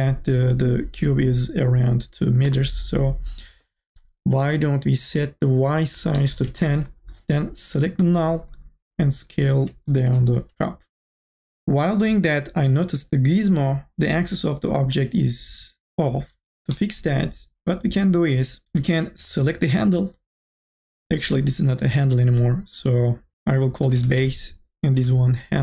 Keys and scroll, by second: 6.3 KP_1, 6.4 KP_0, 6.5 Return, 10.0 t, 13.1 ctrl+z, 24.1 s, 24.4 e.